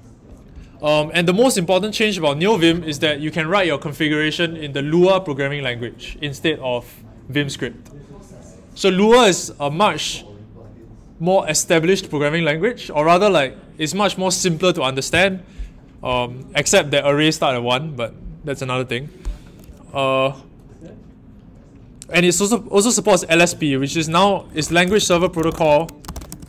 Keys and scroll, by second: 24.6-26.4 typing.